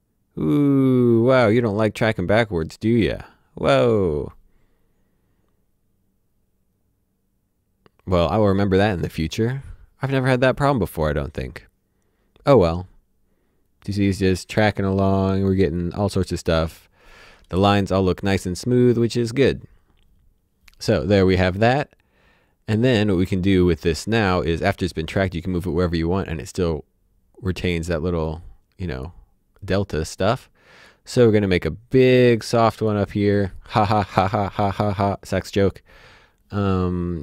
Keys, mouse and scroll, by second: 24.3 click.